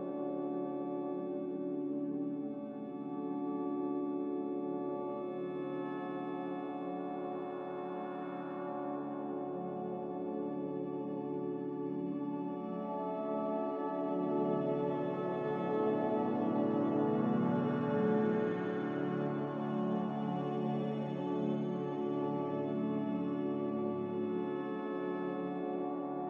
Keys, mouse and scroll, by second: 1.4 ctrl+v, 3.2 a.